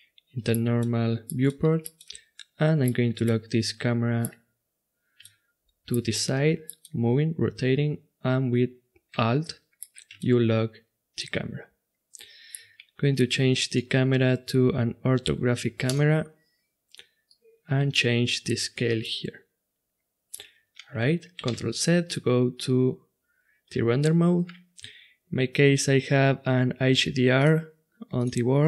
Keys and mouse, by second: 13.7-15.6 drag, 15.8-19.0 drag, 19.0-21.0 middle drag, 21.8 shift+z, 27.3-28.6 drag.